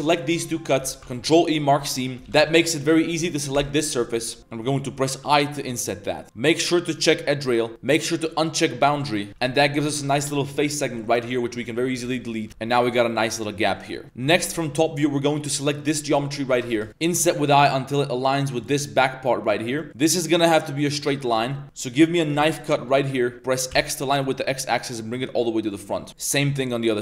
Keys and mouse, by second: 0.5 middle drag, 1.0 ctrl+e, 1.9 middle click, 2.1 3, 2.2 a, 2.4 a, 3.5 l, 4.0 middle click, 4.4 middle click, 5.1 i, 8.3 click, 8.9 click, 9.3 3, 9.3 a, 9.6 click, 9.6 a, 10.6 alt+click, 11.0 alt+click, 11.7 alt+click, 12.1-12.6 typing, 12.2 click, 12.5 Tab, 12.6 drag, 12.9 click, 13.2 middle drag, 13.5 middle click, 13.7 shift+middle drag, 14.0 Tab, 14.0-14.5 typing, 16.7 b, 16.9 ctrl+z, 17.0 i, 19.9 ctrl+z, 21.3 1, 21.6 a, 22.3 k, 26.1 a, 26.1 k.